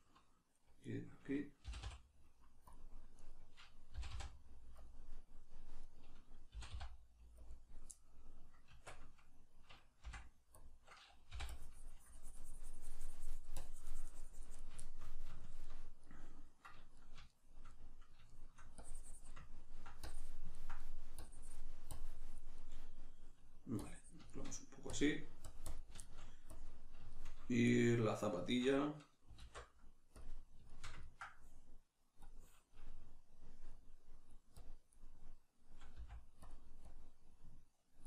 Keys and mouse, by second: 0.8 right click, 1.6 g, 2.7 click, 3.1 right click, 4.0 g, 4.9 click, 5.8 right click, 6.6 g, 7.5 click, 7.9-10.6 middle drag, 8.7 Tab, 10.6 click, 11.3 i, 11.5-14.8 drag, 14.8-18.8 shift+middle drag, 18.8 click, 19.5 ctrl+middle click, 20.0 click, 20.6 ctrl+middle click, 21.2-22.6 drag, 22.6-23.8 middle drag, 23.8 click, 24.3 shift+middle click, 24.9-26.0 drag, 26.0 shift+middle click, 26.5 click, 27.1-32.2 shift+middle drag, 29.3 alt+q, 32.2-36.5 drag, 35.9 f.